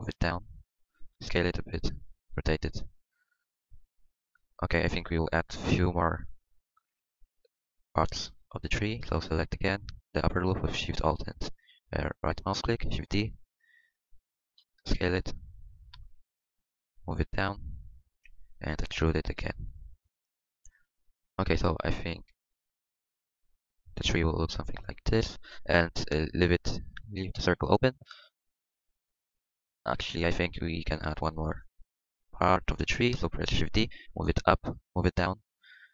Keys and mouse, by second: 1.3 s, 2.3 r, 3.5-4.6 drag, 5.3 KP_1, 13.1 shift+d, 14.6 s, 15.8 s, 17.4 r, 18.7 e, 19.3 s, 28.8-29.9 middle drag, 31.5 KP_1, 33.6 KP_1, 33.7 shift+d.